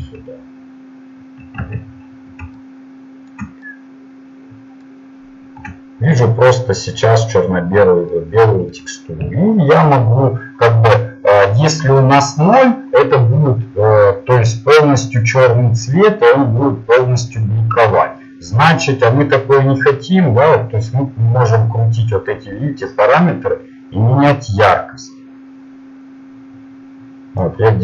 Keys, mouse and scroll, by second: 0.5 KP_Decimal, 1.7 Tab, 20.7-22.7 drag, 23.9 click.